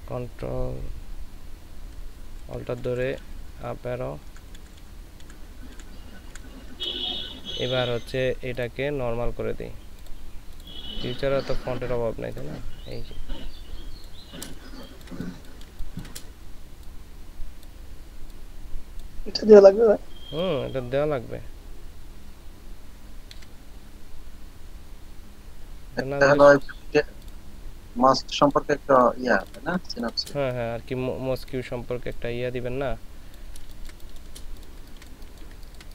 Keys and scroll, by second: 2.8 alt+Up, 3.5 alt+Up, 4.6 Up, 5.2 Up, 5.7 Up, 6.3 Up, 14.7 ctrl+space, 29.3 ctrl+space, 33.6 ctrl+space, 34.9-35.5 typing.